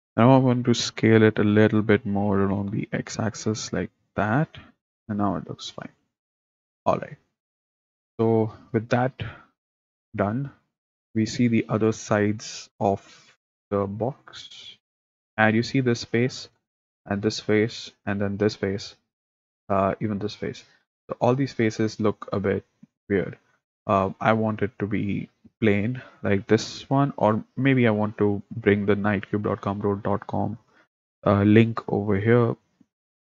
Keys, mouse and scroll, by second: 0.4 s, 10.1-14.8 middle drag, 14.8 click, 16.2 middle click, 17.0 click, 17.3-18.4 middle drag, 18.4 click, 18.6-20.0 middle drag, 20.0 click, 20.4-23.4 middle drag, 24.0-26.6 middle drag, 26.6 click, 27.2-33.2 middle drag.